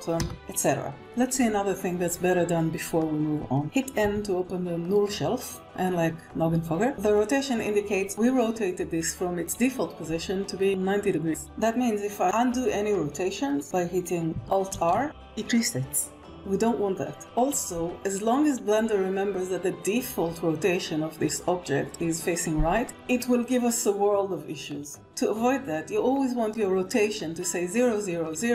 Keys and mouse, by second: 0.8 KP_1, 4.6 n, 14.6 alt+r, 15.9 ctrl+z.